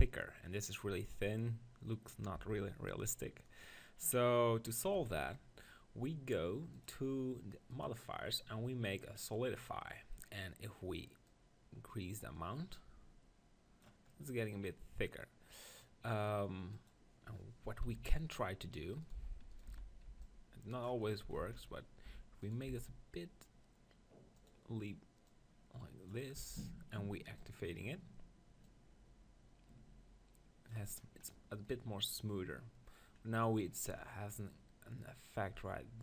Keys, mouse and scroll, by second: 0.7-2.3 middle drag, 2.3 Tab, 5.0 Tab, 8.3-9.6 drag, 9.8-12.9 middle drag, 11.5-13.3 drag, 14.1 middle click, 16.7-18.6 drag, 17.8 KP_1, 18.1 Tab, 19.0-21.4 right drag, 19.7 z, 20.1 b, 21.0 click, 21.4 z, 22.0 e, 22.5-24.3 right drag, 22.7 s, 24.3 click, 24.5-30.8 drag, 26.4 Tab, 31.0-32.0 middle drag, 33.2 middle click, 35.5 Tab.